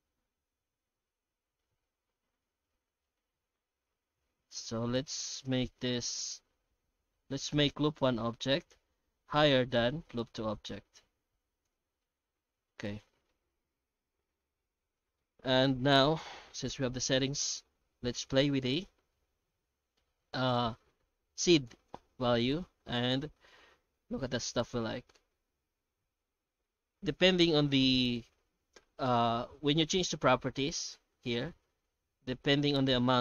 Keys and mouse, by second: 12.1-13.3 middle drag, 14.4 middle click, 15.2 F9.